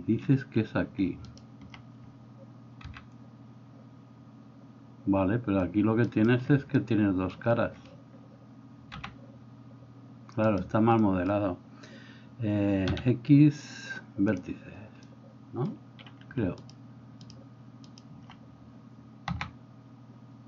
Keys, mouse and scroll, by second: 2.9 g, 9.0 g, 13.0 x, 17.9 alt+middle click, 17.9 alt+right click, 19.3 s.